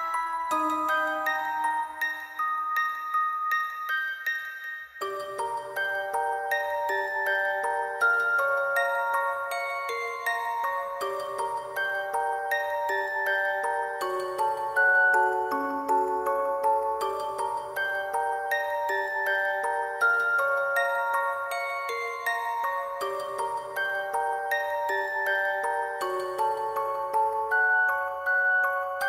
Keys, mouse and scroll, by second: 3.0 alt+click, 4.9 alt+click, 8.2 shift+click, 8.2 alt+click, 9.0 alt+click, 9.2 alt+click, 9.7 scroll down 1, 11.3 alt+click, 11.4 alt+click, 15.3 shift+click, 16.5 alt+click, 21.0 alt+click, 23.2 alt+click, 23.3 alt+click, 25.4 shift+click, 25.7 alt+click, 25.8 alt+click, 28.4 shift+click, 28.6 alt+click.